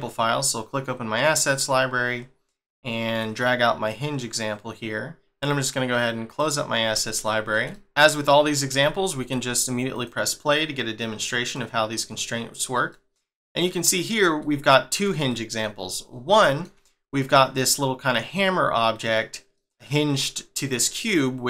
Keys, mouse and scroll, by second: 0.7-2.8 scroll down 1, 3.2 click, 6.3 click, 7.0 shift+middle click, 8.8 shift+middle click, 9.9 click, 11.5 middle click, 12.9 middle click, 13.8 scroll up 1, 14.5 shift+middle click, 16.0 scroll up 1, 16.4 shift+middle click, 19.5 middle click.